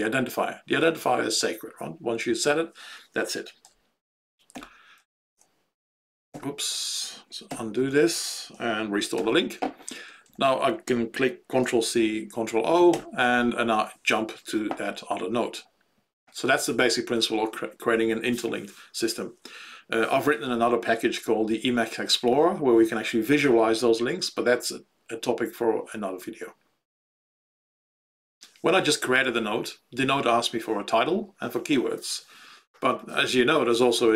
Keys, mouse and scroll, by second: 3.6 End, 4.5 ], 6.2 ctrl+/, 7.4 ctrl+/, 8.5 End, 9.1 ], 10.2 Left, 10.4 Left, 10.5 Left, 13.0 ctrl+o.